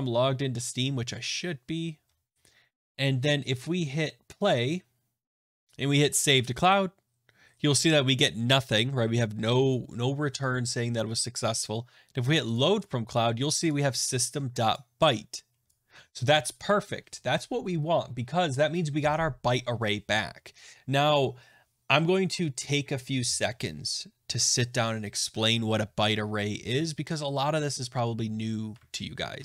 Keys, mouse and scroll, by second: 5.4 click, 6.0 click, 12.5 click, 13.6 click, 14.7 click, 15.6 click, 28.7 alt+Tab, 29.3 alt+Tab.